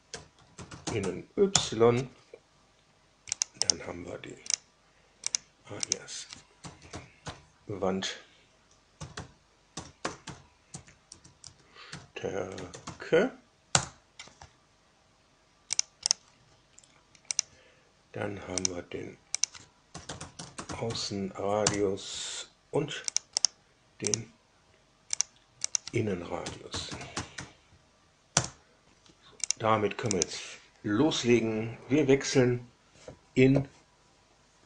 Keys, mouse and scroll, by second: 0.0-1.4 typing, 1.4 Return, 3.3 click, 3.6 right click, 4.4 drag, 5.2 click, 5.8 click, 6.3-7.7 typing, 8.7-13.3 typing, 13.7 Return, 15.7 click, 16.0 right click, 17.3 click, 18.5 drag, 19.3 click, 19.6-21.3 typing, 21.6 Return, 23.0 click, 23.4 right click, 24.0 click, 25.1 click, 25.6 click, 26.1-27.8 typing, 28.3 Return, 29.4 click, 30.1 click.